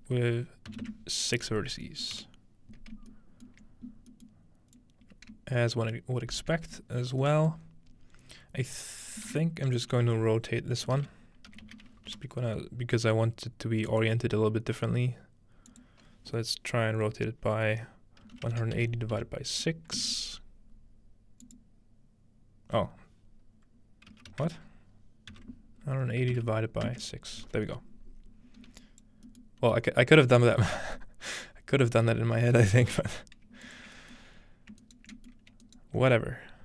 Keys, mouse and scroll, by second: 0.7 scroll up 1, 1.8-3.1 middle drag, 3.4 shift+middle click, 4.8-8.0 shift+drag, 9.3 typing, 9.8 shift+click, 10.9-12.2 typing, 13.9-17.6 drag, 20.0 Return, 21.4-23.2 drag, 28.8 click, 29.7 g, 30.3 ctrl+click, 31.5 ctrl+click, 32.1-33.8 scroll down 1, 32.9 typing, 33.7-35.3 ctrl+drag, 34.3-35.5 scroll up 1, 34.8 ctrl+right click, 35.7 alt+right click.